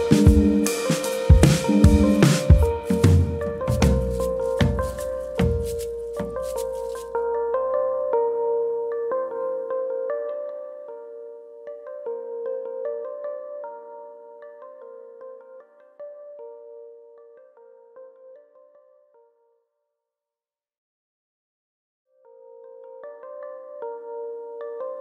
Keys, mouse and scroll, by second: 0.6 click, 1.6-1.9 scroll down 3, 2.6 click, 2.6 scroll up 1, 2.8 middle click, 3.5 shift+click, 4.1 KP_3, 5.2 click, 6.3 scroll down 4, 7.7 alt+click, 8.1 s, 8.6 click, 9.0 alt+click, 9.9 alt+click, 10.2 s, 10.9 click, 11.1 middle click, 11.5 scroll down 2, 11.7 Tab, 12.1 middle click, 12.3-12.8 scroll up 3, 12.5 middle click, 12.8 Tab, 13.1 middle click, 15.9 click, 16.7 shift+click, 16.9 middle click, 17.5 click, 18.8 middle click, 19.9 middle click, 19.9 scroll up 2, 20.1 middle click, 20.9 1, 21.2 click, 21.5 middle click, 22.2 g, 23.4 click, 23.6 middle click.